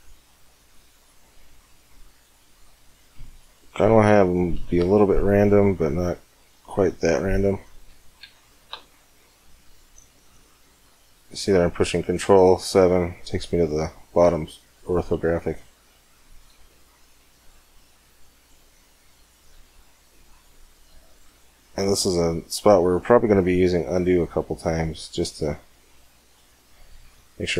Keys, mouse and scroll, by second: 3.6 right click, 3.8 click, 4.2 click, 4.2 right click, 4.6 c, 5.4-7.7 middle drag, 8.4 ctrl+KP_7, 10.2 c, 21.0 middle click, 21.9 c, 21.9 click, 21.9 right click, 22.1 middle click, 22.8 click.